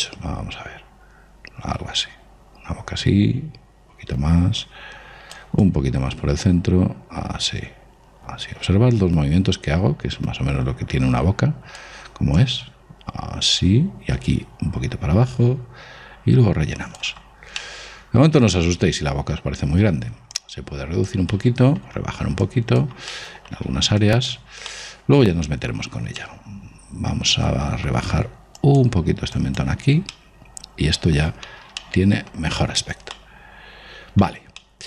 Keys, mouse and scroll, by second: 6.0 click, 12.8 click, 17.6-19.7 middle drag, 20.7 click, 21.7-22.8 middle drag, 22.8-26.1 drag, 26.0-28.3 middle drag, 26.2 click, 29.0-31.5 drag, 30.5-34.8 middle drag.